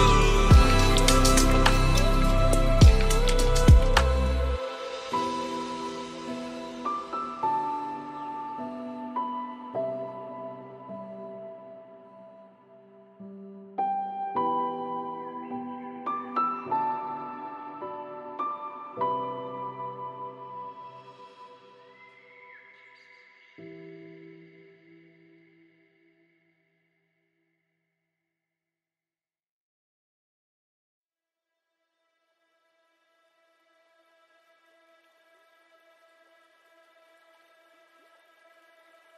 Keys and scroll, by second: 3.3 ctrl+g, 5.6 ctrl+space, 21.2 ctrl+d, 22.0 ctrl+space, 34.0 ctrl+d.